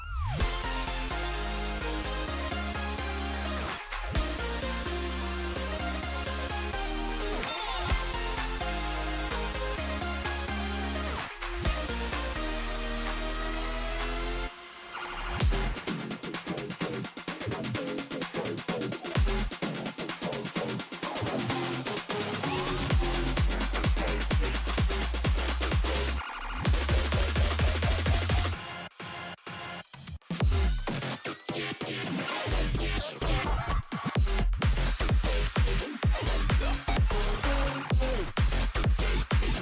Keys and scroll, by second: 11.7 1, 13.8-15.5 typing, 38.8 Escape.